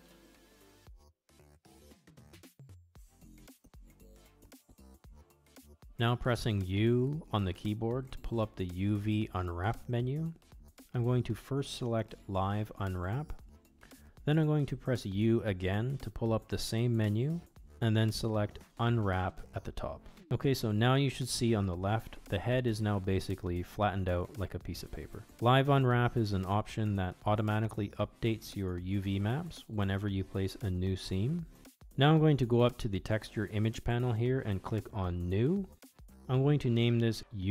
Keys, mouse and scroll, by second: 3.3-4.9 middle drag, 5.5 middle click, 6.3 middle click, 7.8 a, 9.1 u, 16.4 u, 23.5-24.9 middle drag, 26.1-27.3 drag, 31.2 middle click, 35.3-37.5 drag.